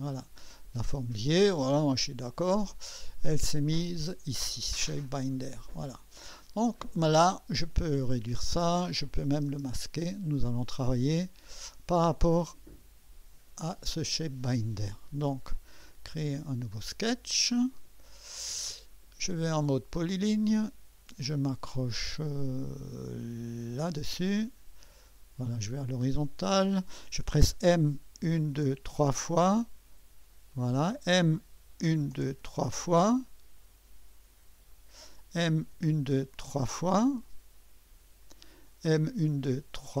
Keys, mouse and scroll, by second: 1.7 click, 2.7-6.5 scroll down 2, 6.8-8.0 scroll up 2, 8.0 click, 9.0-12.5 drag, 9.5 space, 16.0 click, 20.3 click, 23.7 click, 26.3 click, 30.5 click, 30.5 typing, 31.8 typing, 34.5-35.2 typing, 34.7-40.0 drag, 38.0-38.7 typing.